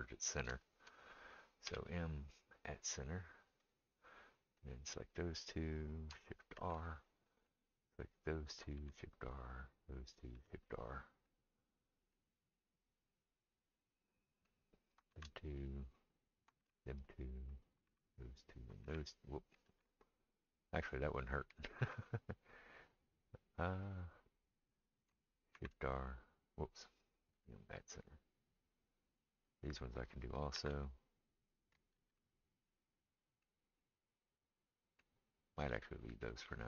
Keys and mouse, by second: 0.0 click, 0.2 shift+middle click, 0.6 shift+click, 0.7-4.6 shift+middle drag, 1.7 m, 4.6-36.6 drag, 6.5 shift+r, 8.7 shift+r, 10.3 shift+r, 15.1 shift+r, 16.6 shift+r, 17.9 shift+r, 18.8 shift+r, 19.7 ctrl+a, 21.6 ctrl+z, 25.5 shift+r, 27.3 m, 30.5 shift+r, 31.9 ctrl+z.